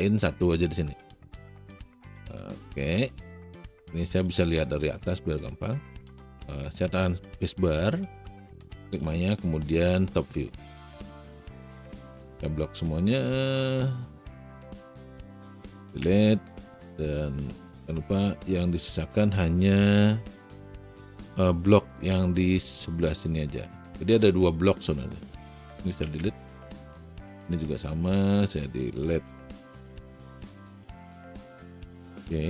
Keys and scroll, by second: 4.0 alt+space, 7.7 space, 16.0 Delete, 26.2 Delete, 29.6 Delete.